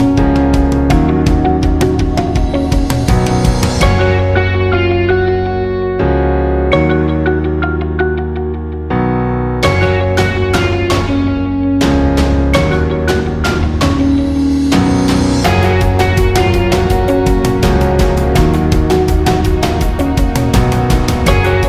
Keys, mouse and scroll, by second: 0.9-6.2 shift+drag, 14.5 click.